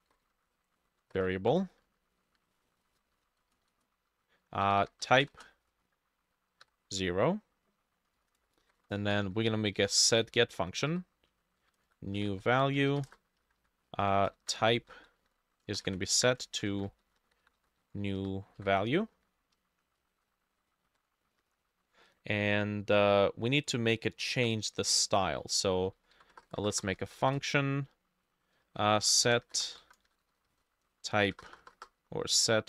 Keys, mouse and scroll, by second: 0.0-1.2 typing, 0.9 ctrl+Left, 2.4-5.2 shift+drag, 2.4-3.6 shift+middle drag, 2.9-6.7 typing, 3.2 ctrl+Right, 8.0-13.5 typing, 13.5 Up, 13.6 Up, 14.2 ctrl+Right, 14.7 ctrl+c, 14.8 Down, 15.0 Down, 15.3 ctrl+v, 15.7 space, 15.8 =, 16.2 Up, 16.5 ctrl+shift+Left, 16.8 ctrl+c, 16.9 Down, 17.1 Right, 17.3 Right, 17.5 Right, 17.6 Right, 17.8 Right, 18.5 middle click, 18.6 ctrl+v, 20.2 shift+Tab, 20.9 Home, 21.0 Tab, 21.4 ctrl+Right, 21.5 ctrl+Right, 21.7 ctrl+Right, 24.4 BackSpace, 25.7-32.6 typing, 30.0 middle click, 30.9 shift+middle click.